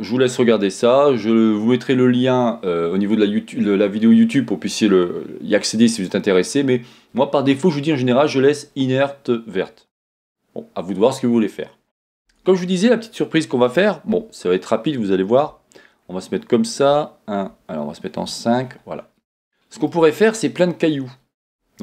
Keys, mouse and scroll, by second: 12.3 Tab, 12.6 scroll down 1, 14.1 KP_1, 15.5 KP_5, 16.0-16.9 scroll down 3, 16.9 KP_1, 17.5 KP_5, 18.6 scroll down 1, 19.4-21.2 shift+middle drag, 20.1-21.2 scroll up 2, 21.5 g.